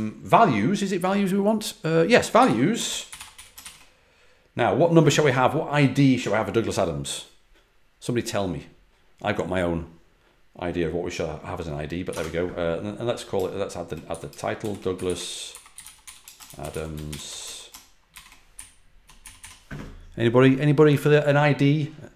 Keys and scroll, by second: 2.0-4.0 typing, 12.0 ,, 14.0-18.0 typing, 18.5 Left, 18.7 Left.